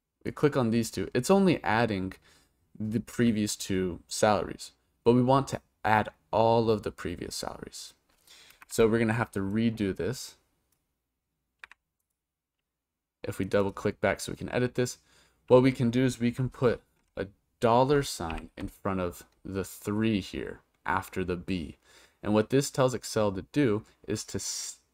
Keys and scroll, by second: 8.6 Return, 18.3 shift+4.